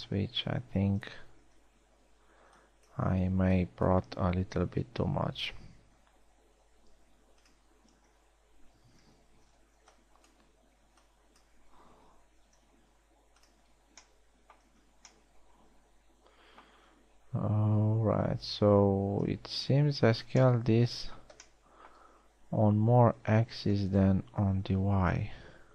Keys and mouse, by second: 0.8-4.0 typing, 5.4 s, 8.7 z, 9.6 z, 10.1 a, 10.5 b, 11.6 b, 13.0 s, 14.2 a, 15.4 z, 17.6 middle click, 21.8-22.4 middle drag, 22.5-24.6 middle drag.